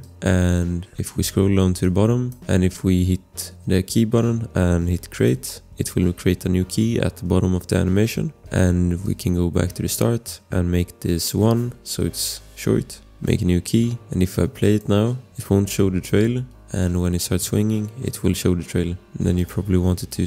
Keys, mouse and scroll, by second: 0.0 click, 0.0 scroll, 1.8 click, 2.4 click, 5.7 scroll, 9.0 click, 11.1 click, 12.0 1, 12.1 Return, 13.1 click, 14.6 click, 16.4 click, 17.4 click, 17.8 click, 18.8 space, 19.4 click.